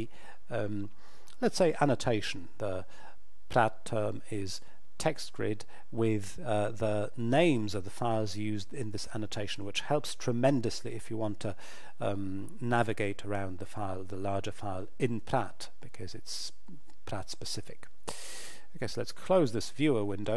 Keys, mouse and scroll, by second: 19.2 click.